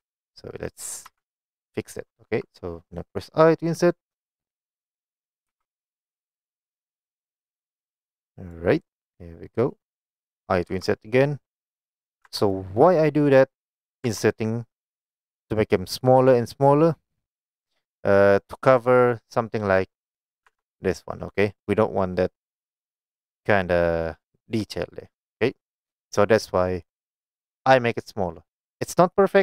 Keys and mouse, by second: 1.1 3, 5.7 i, 8.5 click, 10.9 i, 12.2 click, 12.3 Tab, 12.6-12.9 middle drag, 13.3-13.7 middle drag, 14.2 Tab, 19.4 middle click, 20.6 Tab.